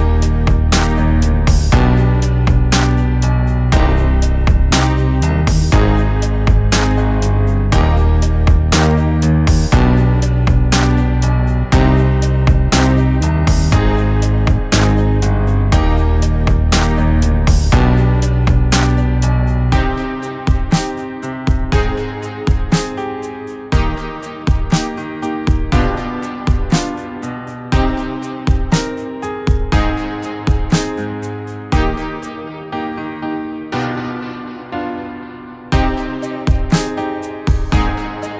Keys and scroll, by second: 6.0 ctrl+t, 6.7 ctrl+t, 8.9 ctrl+z, 11.8 ctrl+t, 14.6 ctrl+t, 17.0 ctrl+t, 19.1 ctrl+t, 21.1 ctrl+t, 22.5 ctrl+t, 29.3 Delete, 30.4 ctrl+t, 32.6 ctrl+t, 34.1 ctrl+t, 36.8 ctrl+t.